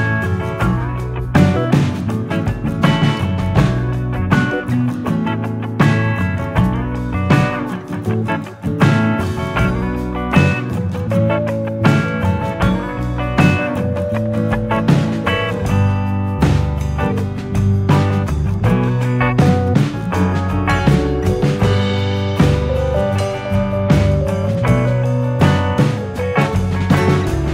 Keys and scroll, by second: 16.6 F9.